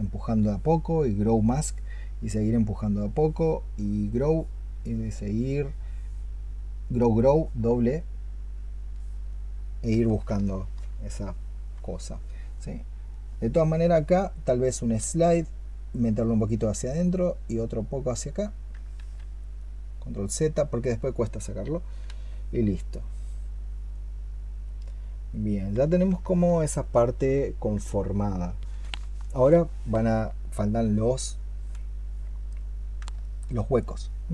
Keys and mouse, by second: 6.8 double click, 10.3 alt+click, 18.8 ctrl+z, 26.1 alt+click, 33.0 alt+click.